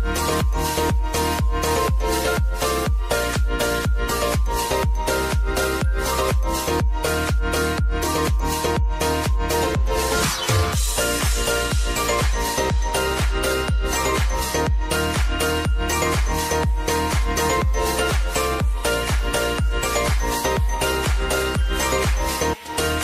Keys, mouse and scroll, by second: 0.2 p, 0.9 click, 1.6 u, 3.8 Down, 8.6 click, 9.3 space, 11.1 click, 13.7 space, 15.8 click, 16.2 space, 18.1-19.5 drag, 20.4 p, 21.2 click, 22.2 s, 22.6 click.